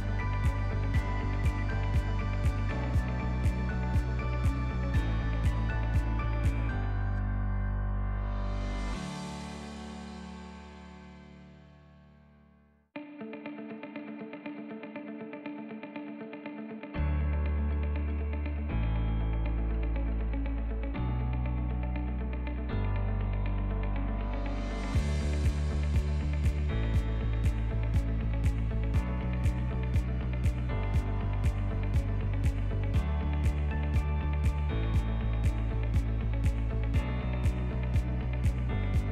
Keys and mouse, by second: 4.1 Tab, 4.5 alt+z, 4.9-5.4 middle drag, 5.5 middle drag, 5.9-6.3 ctrl+middle drag, 6.5-6.9 middle drag, 7.4 /, 8.1 ctrl+middle click, 8.5 ctrl+s, 9.3-9.6 middle drag, 10.3 g, 12.3 alt+z, 13.0 click, 13.5 click, 15.9 alt+z, 16.9-17.7 middle drag, 17.8-18.3 ctrl+middle drag, 18.7 click, 19.2 click, 19.6 click, 20.1 click, 21.1 h, 21.7 click, 22.6 shift+click, 23.6 ctrl+p, 25.5 alt+h, 25.9 click, 26.2-26.6 middle drag, 28.0 shift+a, 31.3 s, 31.4 z, 32.3 drag, 32.8 z, 33.5 s, 36.2 shift+middle click, 37.0 alt+g, 37.9-39.1 middle drag.